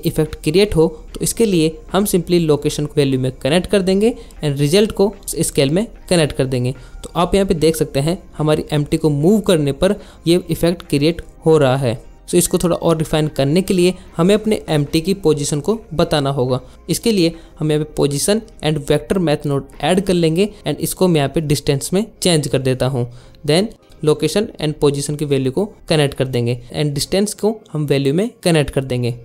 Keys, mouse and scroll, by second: 0.1 g, 0.4 click, 1.8 right drag, 2.8 click, 4.2 click, 10.9 click, 11.4 shift+click, 11.6 shift+middle click, 12.4 click, 12.9-15.3 shift+drag, 16.9 shift+a, 19.9 shift+a, 21.5 click, 21.7-22.5 drag, 24.3 click, 25.9 click.